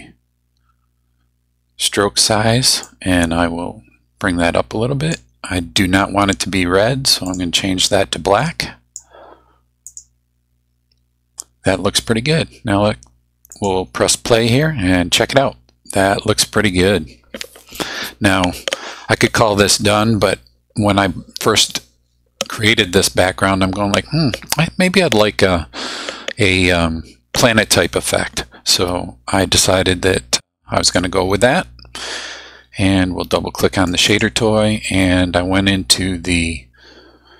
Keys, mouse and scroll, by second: 2.8-5.3 drag, 7.3 click, 8.4-9.2 drag, 9.9 click, 13.5 click, 30.8 click, 33.9 click.